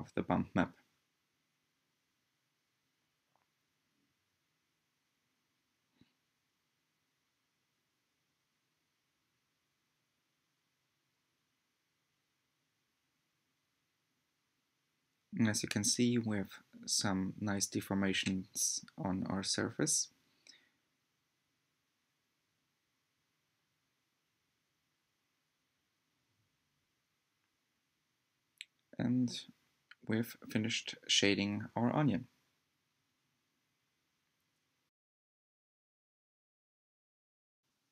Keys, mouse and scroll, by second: 2.0 ctrl+shift+click, 5.3 scroll up 1, 8.3-14.5 shift+middle drag, 14.5 click, 18.4 scroll down 1, 20.5-30.7 drag, 35.7 scroll down 2.